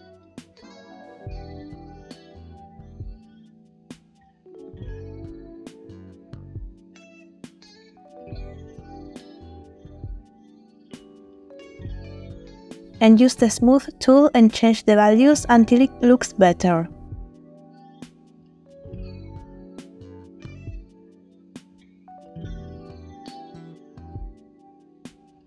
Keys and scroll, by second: 20.0 space.